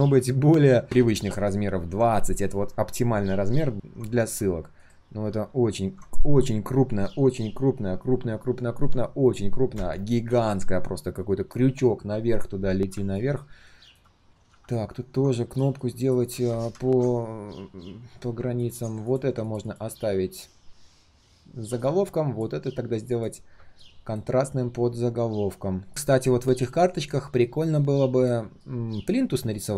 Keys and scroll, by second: 0.8 ctrl+a, 16.3 ctrl+z, 16.8 ctrl+z.